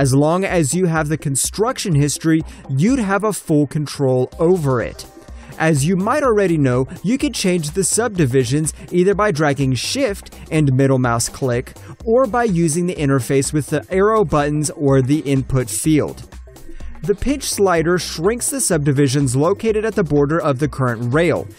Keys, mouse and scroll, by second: 1.9 ctrl+shift+click, 3.0 alt+click, 4.7 shift+middle click, 5.6 ctrl+click, 7.1 shift+middle click, 8.1 ctrl+click, 8.8 shift+middle click, 11.0 alt+middle click, 11.4 alt+click, 11.8 click, 12.5 shift+middle click, 14.2 alt+middle click, 15.1 click, 15.5 double click, 16.1 click, 16.4 double click, 19.8 alt+middle click, 19.8 alt+scroll up 1, 20.0 alt+middle click, 20.9 click.